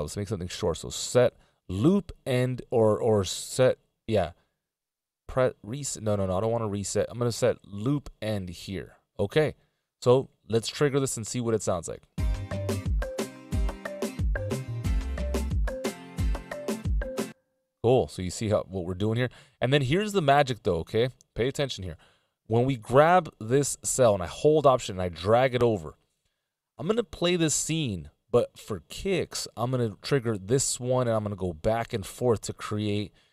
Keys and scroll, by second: 17.1 space, 21.9 Up, 23.1 Up, 23.8 Up.